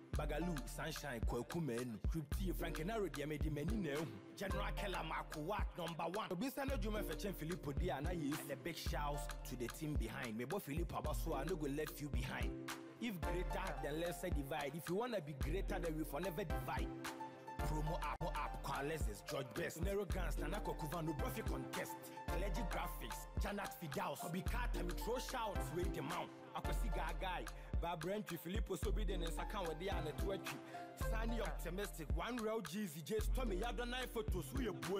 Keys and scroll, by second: 31.6 ctrl+Delete.